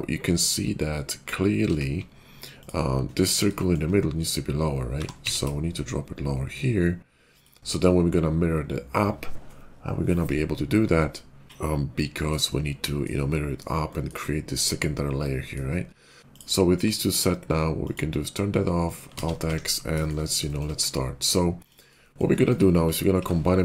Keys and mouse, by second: 1.5 alt+z, 4.9 g, 7.3-17.8 shift+middle drag, 17.8-21.6 drag, 19.1 alt+z, 21.6-22.7 shift+middle drag, 22.7 shift+click, 22.8 shift+middle click.